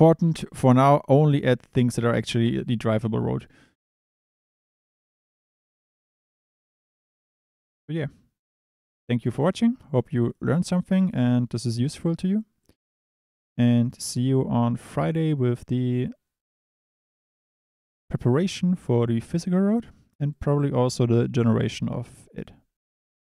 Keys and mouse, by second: 1.3 click, 2.3-2.6 drag, 9.3 click, 10.0 drag, 10.2 click, 10.6 click, 11.3 click, 11.9 click, 12.6 click, 13.0 click, 20.3 click.